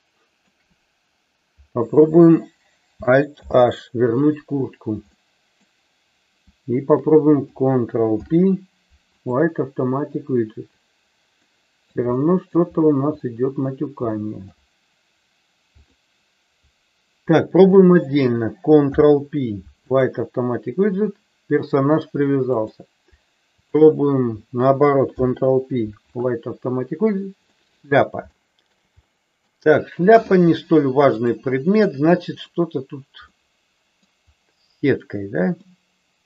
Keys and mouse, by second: 3.4 alt+h, 5.1-5.5 middle drag, 8.0 ctrl+p, 11.5 middle click, 12.1 shift+middle click, 13.1-13.5 middle drag, 14.1 shift+middle drag, 15.6 click, 17.5 shift+click, 18.8 ctrl+p, 25.0 ctrl+p, 27.5 middle click, 28.4 shift+middle click, 29.0 middle click, 31.1 click, 33.3-33.9 middle drag, 35.6-36.2 middle drag.